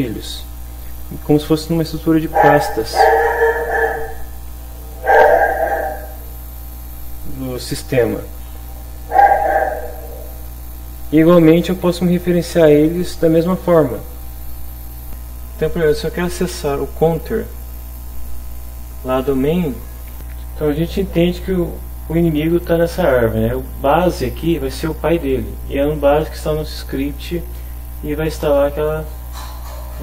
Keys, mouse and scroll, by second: 15.1 click, 21.2 click, 28.4 click.